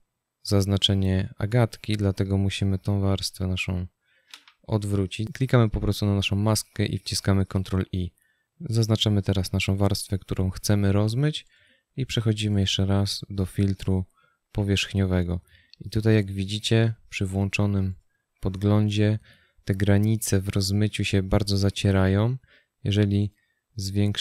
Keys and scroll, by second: 4.6 ctrl+i.